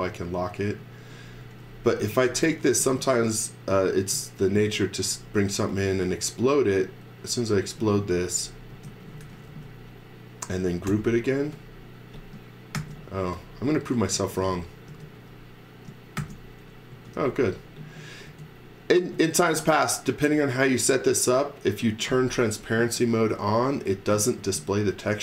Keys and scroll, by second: 1.4 x, 2.4 x, 4.1 space, 8.7 space, 8.8 z, 9.2 x, 9.4 space, 10.5 space, 10.8 g, 12.7 shift+5, 14.1 x, 14.3 v, 14.9 space, 16.2-18.3 typing.